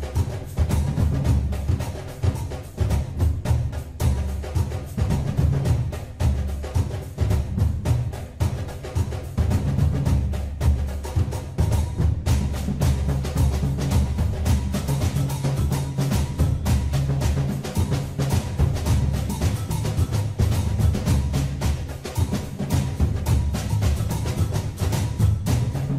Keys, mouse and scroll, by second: 1.6 click, 8.0 n, 9.9 KP_3, 18.9 ctrl+r, 25.4 click.